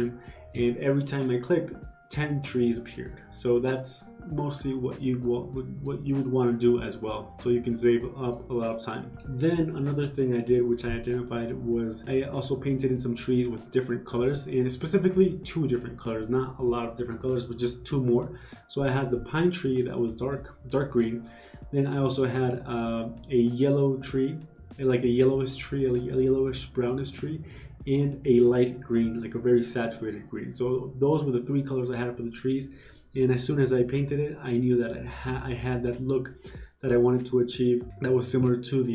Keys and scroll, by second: 0.3 ctrl+z, 4.2 ctrl+z, 4.9 ctrl+z, 6.1 ctrl+z, 6.6 ctrl+z, 17.5 ctrl+z, 21.2 b, 21.4 ctrl+z, 29.2 ctrl+z, 35.9 g.